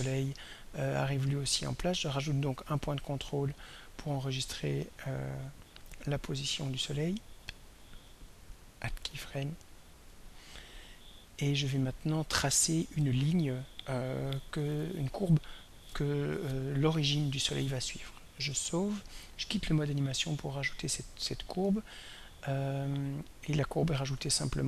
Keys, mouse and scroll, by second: 2.6 click, 8.4 click, 10.1 click, 18.6 ctrl+s, 20.3 click.